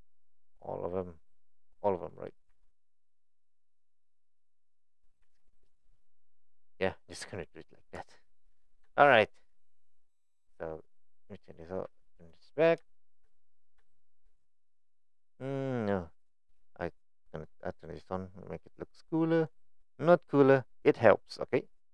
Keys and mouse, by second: 1.6 click, 5.2 s, 7.4 click, 8.0 Tab, 8.9 middle click, 12.2 click, 12.9 shift+middle drag, 13.4 click, 13.9 shift+middle click, 14.8-19.9 drag, 20.4 drag, 21.3-21.9 middle drag.